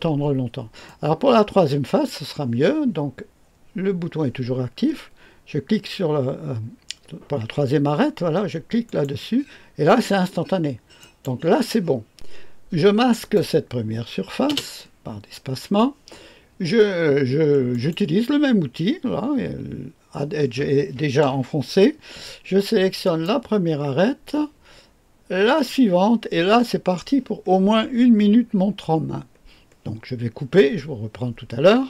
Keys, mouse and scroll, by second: 0.8-2.0 drag, 8.8 click, 10.9 click, 11.8 scroll down 1, 13.1 click, 14.4 space, 17.6 click, 22.9 click, 25.4 click.